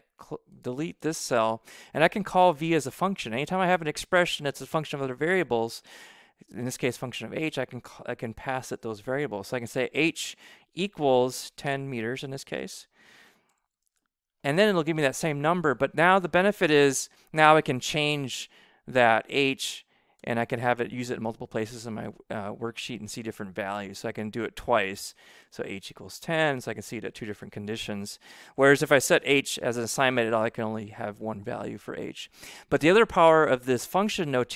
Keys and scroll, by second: 8.3 shift+9, 9.5 h, 10.6-13.8 typing, 18.0 Left, 19.0 BackSpace, 20.1 5, 24.5-29.2 typing.